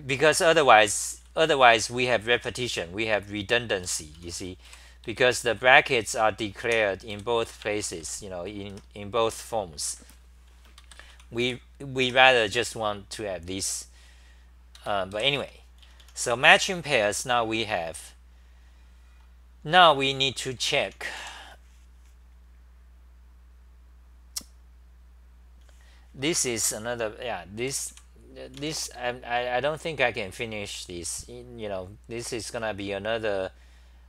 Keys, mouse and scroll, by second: 0.3 ctrl+g, 1.3 c, 1.5 c, 1.6 c, 3.6-5.2 typing, 6.3-7.1 typing, 7.9 ctrl+c, 10.6-12.0 typing, 14.9-17.4 typing, 17.4-20.5 scroll down 6, 20.6 Return, 20.8 o, 21.2 k, 27.9 ., 27.9 ,, 28.6 Home, 31.0 scroll.